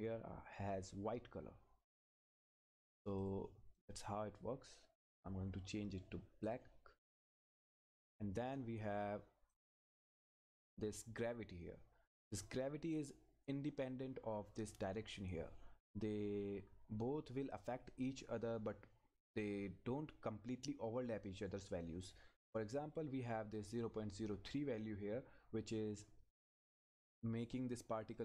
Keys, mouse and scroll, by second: 3.2 click, 7.0-8.1 scroll down 1, 8.1 click, 13.8-14.4 scroll up 1, 17.3 scroll down 1, 17.7-19.5 scroll up 1, 26.9 scroll up 1.